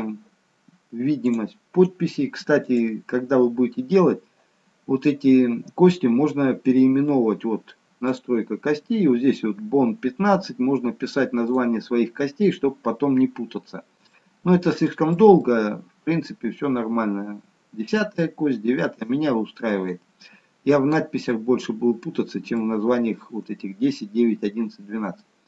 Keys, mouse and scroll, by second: 1.3 click, 2.7 click, 8.2 click, 11.6 click, 13.4-14.2 scroll up 2, 14.2 shift+middle click, 15.6 middle click, 19.3-19.7 scroll down 2, 19.7-21.2 scroll up 1, 21.2 middle click, 21.2-21.6 scroll up 1, 25.1 middle click.